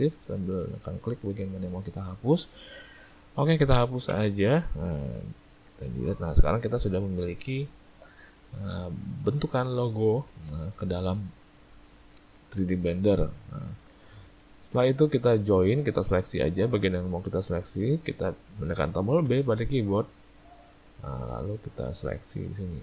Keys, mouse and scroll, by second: 0.6 shift+middle click, 1.1 ctrl+middle click, 1.6 ctrl+middle click, 2.2 shift+middle click, 4.1 Delete, 5.6 shift+middle click, 6.3 ctrl+middle click, 6.8 middle click, 13.1 middle click, 13.6 ctrl+middle click, 14.0 middle click, 14.5 shift+middle click, 14.8 middle click, 15.5 shift+middle click, 15.9 middle click, 16.8 middle click, 17.5 middle click, 17.7 shift+middle click, 19.3 b.